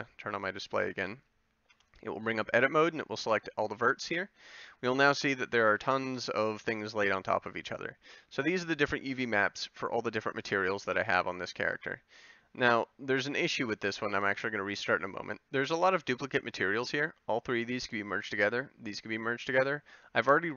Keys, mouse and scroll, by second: 1.9 Tab, 6.0-9.3 middle drag, 14.4-20.5 middle drag.